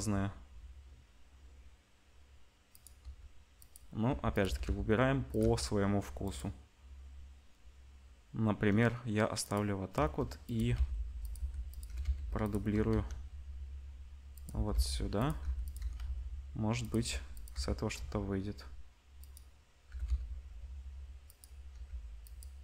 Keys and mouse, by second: 3.0 r, 4.0 g, 4.4 g, 5.4 g, 9.4 click, 9.9-12.7 typing, 14.5 g, 15.4 g, 15.7 r, 16.9 g, 17.5 r, 19.8 g, 21.7 g.